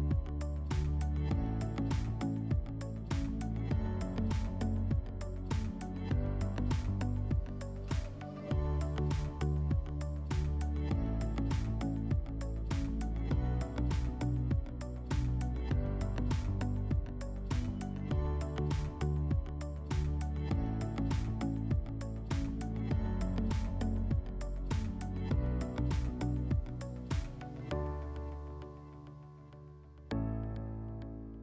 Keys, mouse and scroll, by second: 4.9-6.1 alt+middle drag, 7.5 click, 11.4-12.9 middle drag, 18.3-19.9 drag, 27.7-29.2 drag.